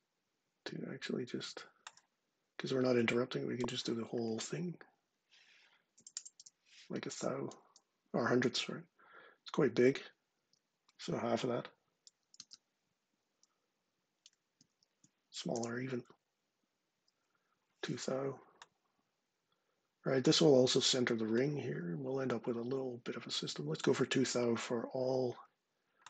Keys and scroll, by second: 5.5-6.6 typing, 10.1 shift+Tab, 11.8-12.6 typing, 14.4 shift+Left, 15.3 2.